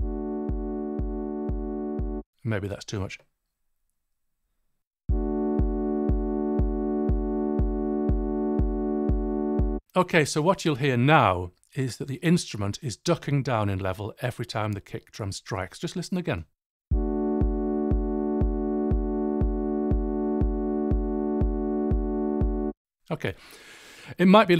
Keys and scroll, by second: 2.1 space, 5.0 space, 9.7 space, 16.8 space, 22.6 space.